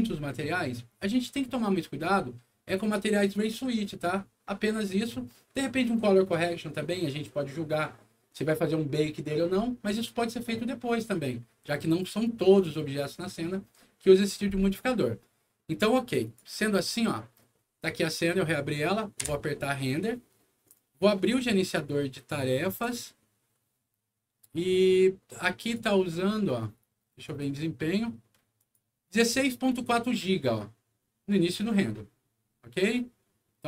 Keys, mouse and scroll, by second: 16.2 click, 16.8 click, 19.2 F9, 20.6 right click, 22.6 click.